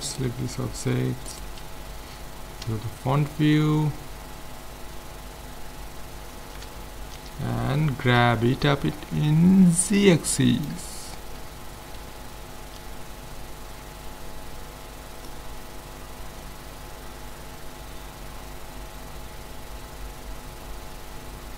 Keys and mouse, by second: 2.2 click, 2.6 KP_1, 8.2-9.9 drag, 10.9-15.3 middle drag, 15.3-17.0 drag.